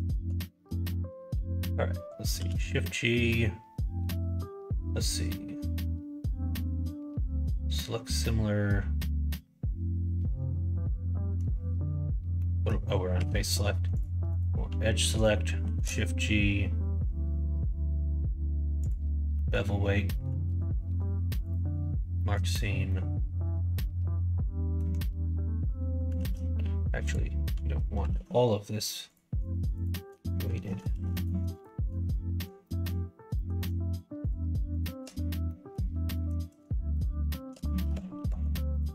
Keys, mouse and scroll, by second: 2.3 shift+g, 12.3 middle click, 13.1 2, 14.3 click, 15.6 shift+g, 19.3 middle click, 20.4 ctrl+e, 22.1 middle click, 22.8-24.7 middle drag, 26.1 ctrl+z, 27.0 click, 28.0 alt+z, 29.0 click, 29.7 shift+click, 30.9 ctrl+z, 31.5 shift+click, 32.0 middle click, 32.6 shift+middle click, 33.3 middle click, 34.7 shift+click, 35.4 middle click, 36.1 middle click, 36.9 shift+click, 37.8 ctrl+z, 38.7 shift+click.